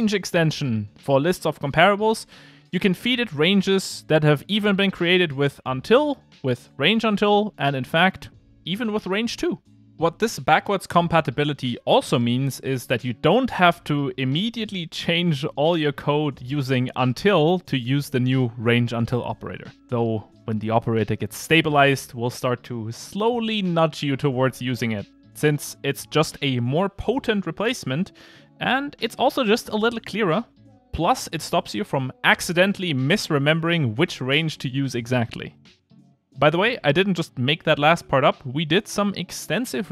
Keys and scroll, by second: 4.6 Return, 8.0 Return.